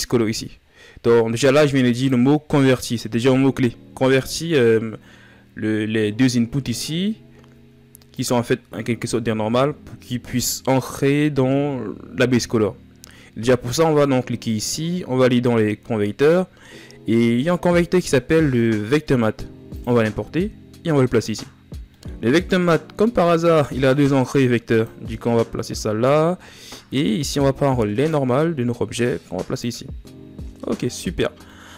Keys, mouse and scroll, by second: 19.5-24.5 drag.